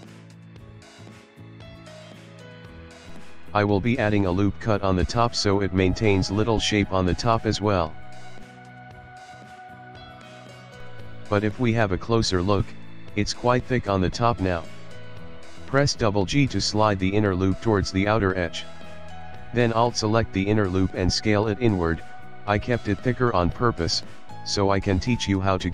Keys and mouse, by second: 0.4 ctrl+middle click, 0.8 middle click, 0.9 middle click, 1.3 ctrl+middle click, 3.1 click, 4.3 ctrl+r, 8.1 shift+middle click, 8.3 shift+middle click, 8.7 KP_1, 9.4 ctrl+middle click, 10.2 ctrl+middle click, 11.6 shift+middle click, 12.1 ctrl+middle click, 12.6 shift+middle click, 14.1 middle click, 14.4 ctrl+middle click, 14.7 ctrl+middle click, 15.2 middle click, 16.2 g, 17.4 alt+click, 17.9 s, 19.9 middle click, 21.6 KP_1, 22.1 ctrl+middle click, 22.7 ctrl+middle click, 22.8 ctrl+middle click, 24.6 middle click, 25.4 KP_Decimal.